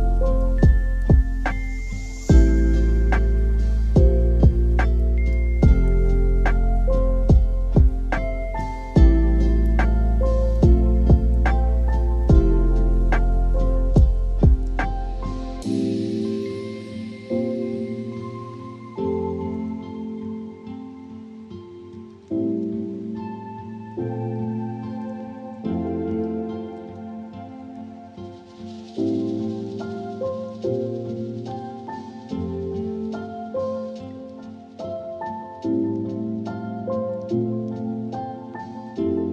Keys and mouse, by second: 6.4 Tab, 9.9 middle click, 10.1 click, 11.2 shift+click, 11.5 middle click, 11.9 shift+click, 12.1 middle click, 13.0 shift+click, 13.5 middle click, 13.8 shift+middle click, 14.1 middle click, 14.7 middle click, 15.3 shift+click, 16.0 click, 16.7 click, 17.1 Tab, 17.4-17.8 middle drag, 18.0 shift+middle click, 19.3 click, 20.4 click, 20.9 click, 22.5 drag, 23.4 click, 24.2-24.8 drag, 25.1-25.6 drag, 26.0 Delete, 26.2 middle click, 27.1-27.5 drag, 27.9 middle click, 28.6-29.4 drag, 29.8 click, 30.6 Delete, 32.8 middle click, 34.3-35.1 drag, 35.9-36.4 drag, 36.7-37.5 drag, 37.8 drag.